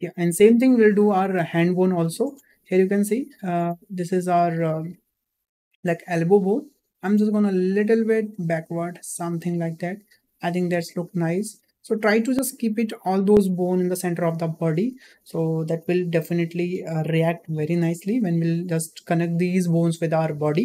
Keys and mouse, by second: 0.0 shift+middle click, 2.1 shift+middle click, 4.6-6.1 drag, 7.2-9.7 drag.